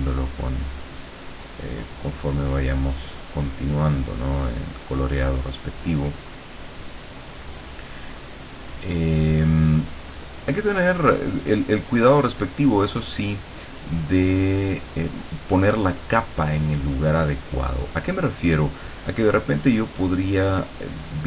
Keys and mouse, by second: 8.3-12.3 drag, 12.4-21.2 drag.